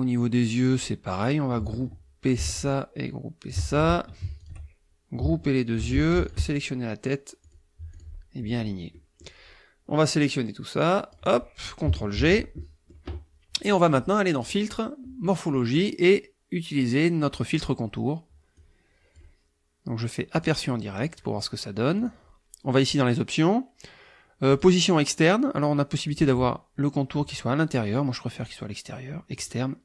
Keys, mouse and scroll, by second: 2.4 ctrl+g, 2.5-3.7 ctrl+drag, 3.7 ctrl+g, 4.4 shift+click, 5.8 ctrl+g, 6.2 ctrl+shift+click, 7.5 click, 7.9 click, 8.9 click, 10.0-11.3 drag, 12.1 ctrl+g, 12.6 ctrl+click, 14.4 click, 17.5 click, 18.6 click, 20.3 click, 22.0 click, 24.5 click, 26.1 click, 28.4 click, 29.4 click.